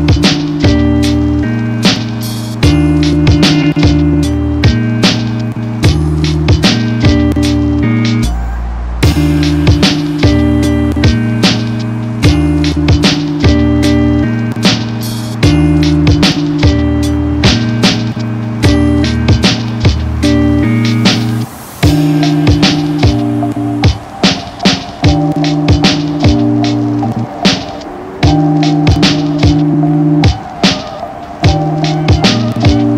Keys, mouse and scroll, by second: 2.7 ctrl+j, 3.1 click, 26.6 shift+click, 31.5 click.